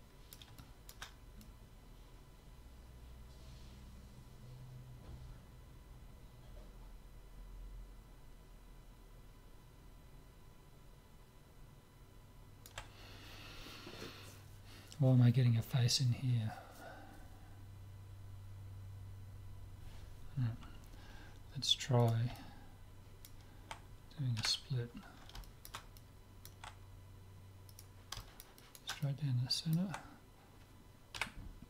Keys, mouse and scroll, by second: 0.6-3.3 middle drag, 22.0-23.9 drag, 22.3 middle click, 23.7 middle click, 24.5 KP_7, 25.4 middle click, 27.7-29.6 right drag, 28.2-29.4 middle drag, 30.9 middle click, 31.1 KP_7.